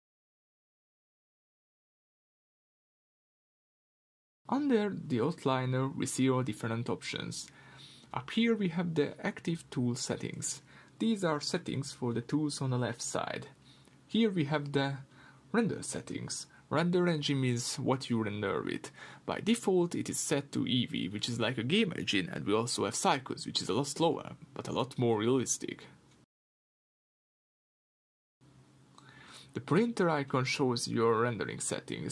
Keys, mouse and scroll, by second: 16.9-32.1 drag.